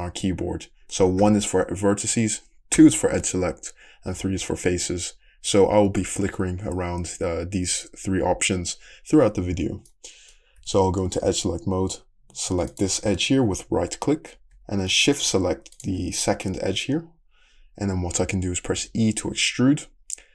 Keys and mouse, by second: 1.2 1, 2.8 2, 4.2 3, 10.6 2, 12.7 middle click, 18.8 e.